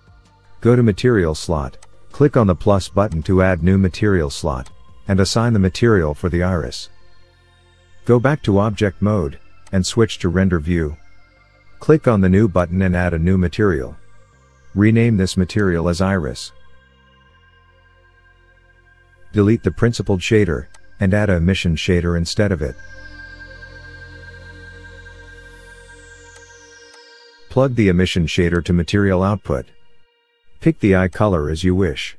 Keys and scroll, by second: 8.0 Tab, 21.6 Delete, 24.1 shift+a.